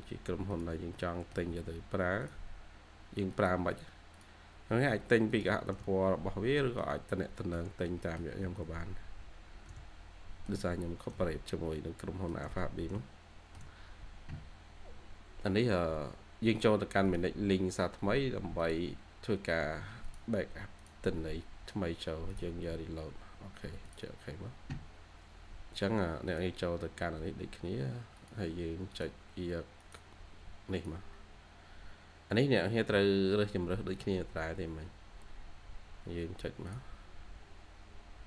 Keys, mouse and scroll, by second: 0.4 ctrl+click, 0.8 middle click, 2.1 ctrl+click, 3.2 ctrl+click, 4.0 ctrl+click, 5.2 ctrl+click, 5.7 middle click, 6.7 shift+scroll down 1, 6.8 shift+middle click, 7.8 middle click, 8.1-9.0 typing, 8.1 scroll down 1, 9.0 scroll down 1, 9.5 middle click, 11.0 middle click, 12.2 shift+scroll down 1, 12.5 middle click, 32.4-33.4 scroll up 1.